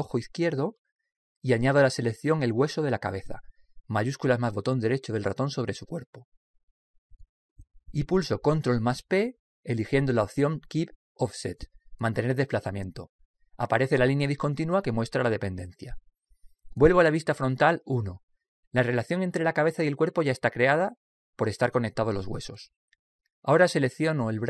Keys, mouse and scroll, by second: 3.7 right click, 9.4 ctrl+p, 17.8 KP_1.